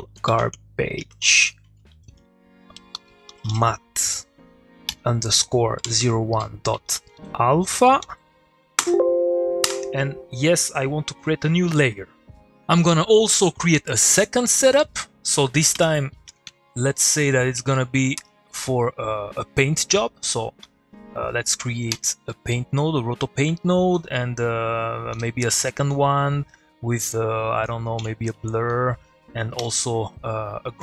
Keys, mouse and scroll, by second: 1.1-4.2 typing, 6.8-8.5 typing, 14.7 middle click, 14.8 click, 14.9 middle click, 15.3 click, 15.7 Tab, 16.2-17.7 typing, 18.2 Return, 18.8 middle click, 19.4 click, 21.9 p, 22.3-23.1 middle drag, 23.9 click, 25.1 p, 25.7 click, 28.0 click, 28.2 middle click, 28.7 click, 29.6 g.